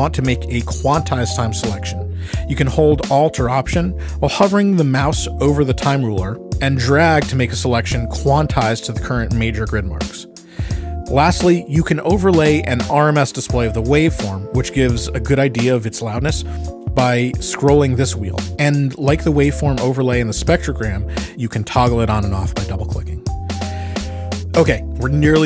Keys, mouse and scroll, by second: 5.5-7.9 alt+drag, 9.9 shift+scroll, 12.9 click, 14.8 click, 15.7-22.7 drag, 24.3 ctrl+scroll.